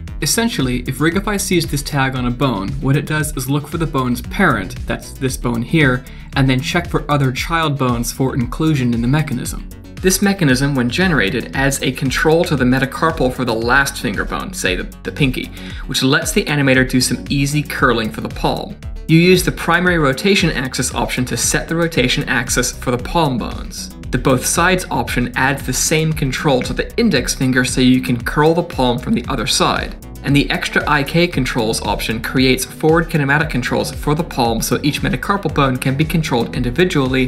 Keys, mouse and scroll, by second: 0.4 click, 0.5 click, 0.9 click, 1.2 middle click, 1.9 click, 2.2 middle click, 5.3 click, 5.9 click, 7.7 click, 8.3 click, 9.9 middle click, 10.2 click, 11.0 scroll down 2, 11.4 middle click, 12.7 shift+click, 13.5 click, 13.9 middle click, 14.3 Tab, 14.9 click, 15.2 middle click, 15.8 r, 19.7 ctrl+z, 19.8 ctrl+z, 19.8 click, 20.0 click, 24.8 click, 24.9 click, 25.5 click, 25.5 middle click, 25.6 Tab, 26.3 shift+click, 26.6 click, 26.7 middle click, 27.0 r, 31.2 middle click, 31.4 ctrl+z, 31.6 ctrl+z, 31.6 middle click, 31.8 click, 32.0 click, 32.1 click, 32.3 click, 32.5 click, 32.6 middle click, 32.7 Tab, 32.9 middle click, 33.1 click, 33.1 middle click, 33.4 shift+click, 33.5 middle click, 33.7 r, 34.2 click, 34.7 r, 35.5 click, 35.8 r, 36.3 middle click.